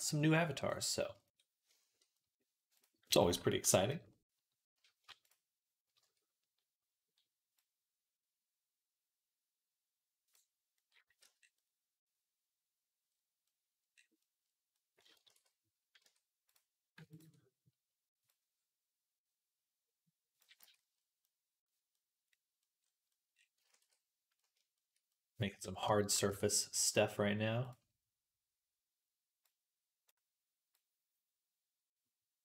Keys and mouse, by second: 0.4 click, 0.4 middle click, 10.7 click, 10.7 middle click, 10.7 right click, 11.1 Tab, 15.2 ctrl+s, 15.9 Tab, 16.8-18.2 ctrl+drag, 20.4 Tab, 23.6 ctrl+s, 26.1 Tab.